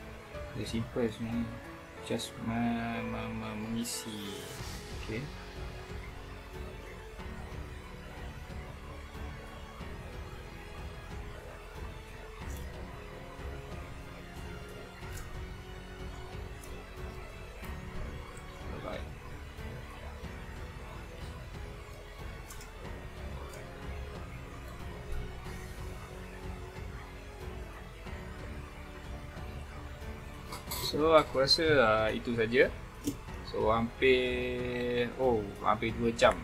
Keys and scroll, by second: 0.9 space, 1.5 super+space, 2.0 super+space, 7.7 alt+super+space, 9.0 super+space, 9.4 super+space, 10.2 alt+super+space, 10.5 alt+super+space, 12.3 super+space, 14.2 space, 14.9 super+space, 15.9 space, 17.3 Escape, 21.6 space.